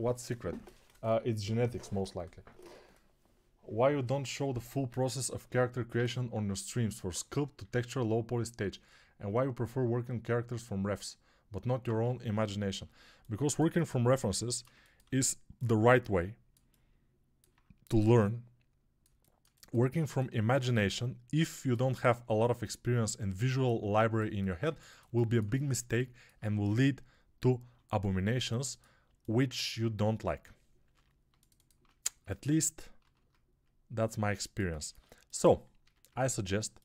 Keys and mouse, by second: 16.4-26.2 alt+drag, 24.8-26.2 alt+shift+middle drag, 26.2-29.6 right drag, 29.6-36.8 middle drag, 32.9 ctrl+b, 35.7 a.